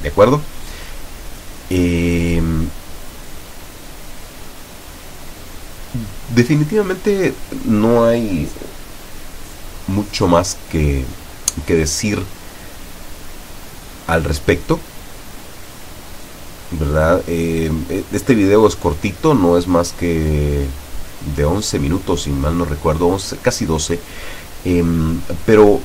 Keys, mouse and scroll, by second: 3.6 w, 3.8 Up, 4.3 Down, 5.0 Up, 6.7 Down, 7.6 Up, 8.6 Down, 9.3 Up, 21.5 Escape, 22.9-23.7 drag, 24.7-25.4 drag.